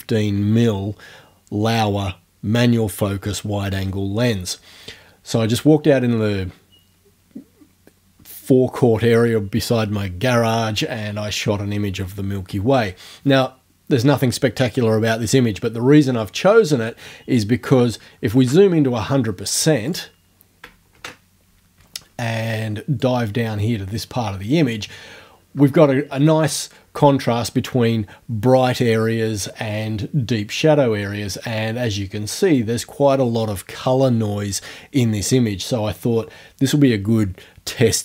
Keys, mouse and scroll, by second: 18.4 alt+1, 19.9 click, 21.0 alt+1, 23.1-25.0 drag.